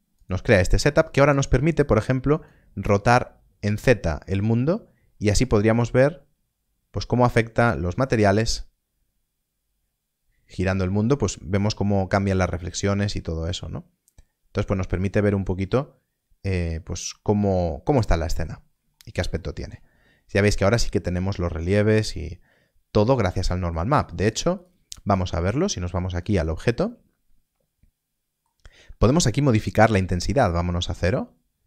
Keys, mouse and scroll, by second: 2.8 click, 7.3 click, 14.4-17.0 drag, 17.0 middle click, 18.6 scroll up 1, 19.3 shift+middle click, 19.9 scroll up 1, 21.5 middle click, 26.2 click, 26.8 middle click, 30.0 click.